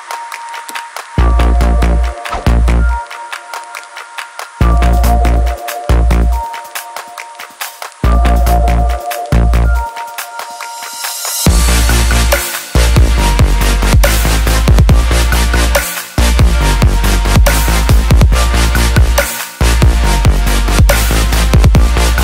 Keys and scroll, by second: 4.1 ctrl+c, 17.0 ctrl+v.